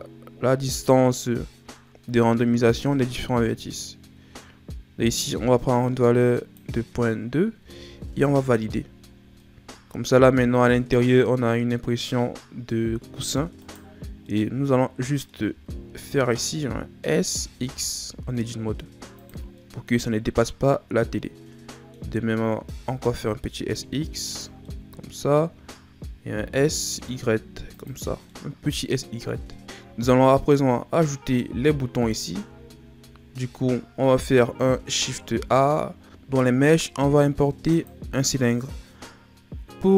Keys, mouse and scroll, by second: 7.6 Tab, 8.0 a, 8.3-9.3 scroll down 3, 9.3-11.3 middle drag, 11.3-12.0 scroll up 4, 12.0-13.6 middle drag, 13.6 right click, 14.1 scroll down 1, 14.2-15.5 middle drag, 15.5 Tab, 17.1 s, 19.5-22.5 middle drag, 22.5 s, 24.6-26.3 middle drag, 26.3 s, 28.0 scroll down 2, 28.2-29.6 middle drag, 29.6-30.0 scroll down 3, 30.3-31.7 scroll up 3, 31.7-33.8 shift+scroll up 3, 34.9 shift+a.